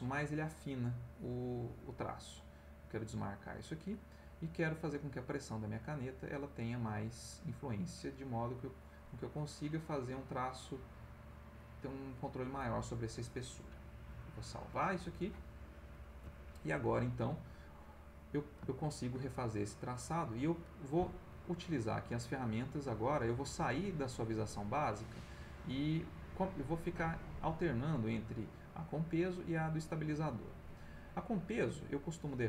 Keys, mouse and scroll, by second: 1.1 click, 2.8 click, 3.6 click, 5.4-8.9 drag, 9.6-11.1 drag, 11.6 click, 12.6 click, 14.7 click, 15.9 click, 16.6 middle click, 18.3-19.8 ctrl+middle drag, 21.4 click, 24.8 click, 30.4 click, 32.0-32.4 drag.